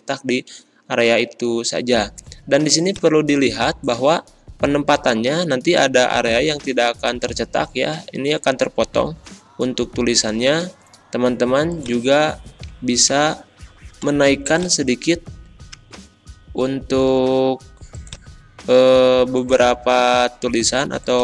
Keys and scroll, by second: 13.1 Escape.